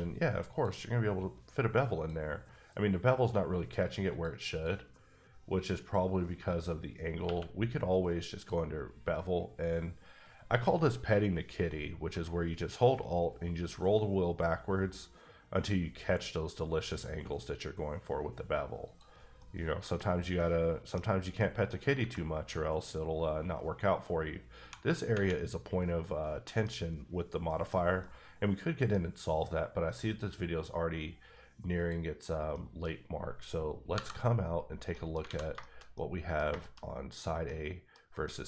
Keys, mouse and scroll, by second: 0.5 click, 1.9 click, 4.5 click, 5.3-6.9 scroll down 5, 6.9-7.2 scroll down 1, 7.2 q, 8.3 click, 12.1 alt+click, 13.0-14.5 alt+scroll down 9, 14.5-15.6 alt+scroll down 5, 15.8 alt+scroll up 3, 16.3-16.7 alt+scroll down 3, 18.8 click, 19.1 scroll down 2, 19.4 middle click, 20.0-20.3 scroll up 2, 20.3 middle click, 20.9 scroll up 2, 21.4 middle click, 22.1 middle click, 22.6 scroll up 1, 23.9 scroll up 1, 24.6 1, 25.1 Tab, 26.2 scroll down 2, 26.4 middle click, 27.2 scroll down 1, 27.4 middle click, 28.0 middle click, 29.9-30.5 scroll down 4, 30.6-31.6 scroll up 3, 31.6 scroll up 1, 31.7 click, 32.5 middle click, 32.9-33.9 scroll up 1, 34.6 scroll down 3, 34.9 middle click, 35.2 alt+a, 35.6 shift+middle click, 37.1 click, 37.4 middle click, 38.0 scroll up 1, 38.2 middle click.